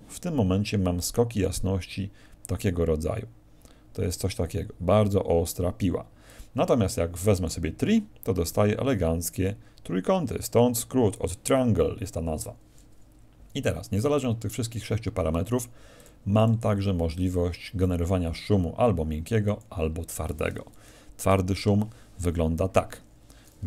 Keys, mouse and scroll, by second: 0.7 d, 0.9 click, 0.9 d, 6.3-6.7 d, 7.3 click, 8.2 d, 8.5 click, 8.5 d, 11.1 d, 15.9 click, 16.3 click, 19.4 click.